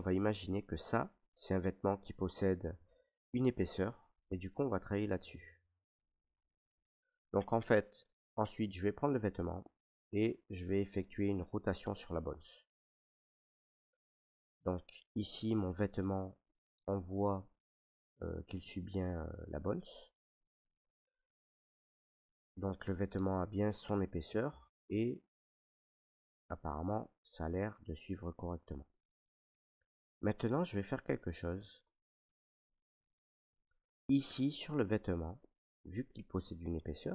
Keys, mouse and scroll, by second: 0.5 right click, 1.9 middle click, 2.2 middle click, 2.3 middle click, 3.6 middle click, 3.8 middle click, 3.9 middle click, 4.2 middle click, 4.3 middle click, 4.4 middle click, 4.4 middle click, 4.5 middle click, 4.7 middle click, 4.8 middle click, 5.7 middle click, 5.9 alt+r, 5.9 right click, 5.9 shift+middle click, 6.0 middle click, 6.8 shift+middle click, 7.6 middle click, 7.8 middle click, 8.4-9.2 scroll, 11.1 middle click, 12.5 scroll, 13.3 r, 14.6 click, 15.3 scroll, 15.9 shift+middle click, 16.2 middle click, 16.3 middle click, 16.8 middle click, 17.8 middle click, 19.0 middle click, 19.7 right click, 20.5 middle click, 21.2 shift+middle click, 22.2 middle click, 22.9 middle click, 25.1 middle click, 26.6 middle click, 26.8 Tab, 27.3 Tab, 29.4 click, 30.0 click, 31.2 middle click, 31.8 Tab, 33.2 middle click, 34.3 middle click, 34.6 middle click, 34.7 middle click, 36.2 middle click.